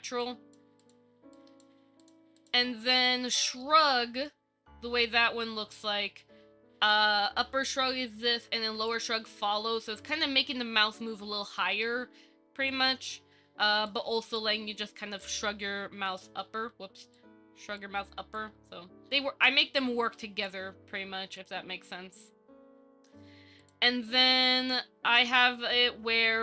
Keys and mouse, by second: 0.5 click, 1.5 click, 3.6 middle click, 4.0-4.5 middle drag, 5.5 KP_1, 7.2 click, 9.1-10.2 drag, 11.8 shift+middle drag, 12.9 click, 14.1 click, 15.4-16.4 drag, 17.3 click, 18.6-20.7 drag, 21.6 click.